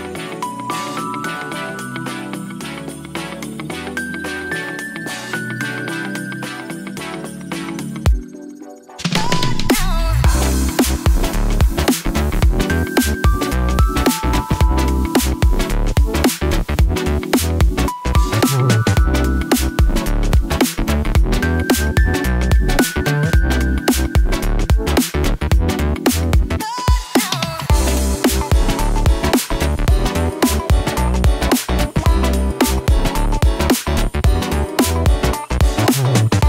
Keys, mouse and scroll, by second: 0.4 click, 0.7 middle click, 1.2-2.2 drag, 2.6 g, 2.8 t, 3.0 y, 5.4 click, 6.6 g, 6.7 y, 8.5 click, 9.0-9.6 middle drag, 9.6 click, 10.0 typing, 12.4 Tab, 13.2-19.1 drag, 32.5 click, 33.4-35.0 drag, 35.4 click, 36.3 click.